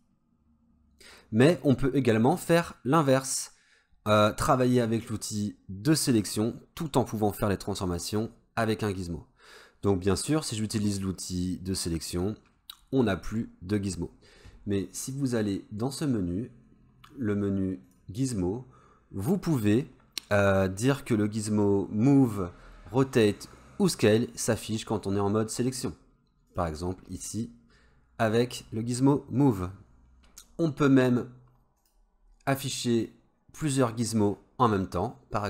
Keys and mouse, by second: 0.0-27.0 drag, 31.8-35.4 drag.